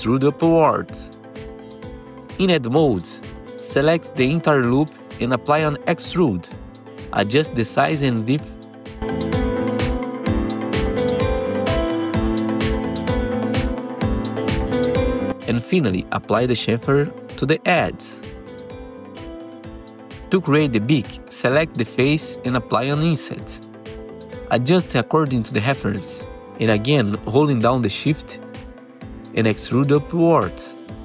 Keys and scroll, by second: 4.2 2, 5.5 F3, 7.1 F3, 7.6 F3, 10.2 F3, 10.7 F3, 12.3 F3, 16.3 ctrl+shift+c, 19.6 2, 19.7 F4, 22.0 F4, 22.8 F4, 24.0 F3, 26.9 F3.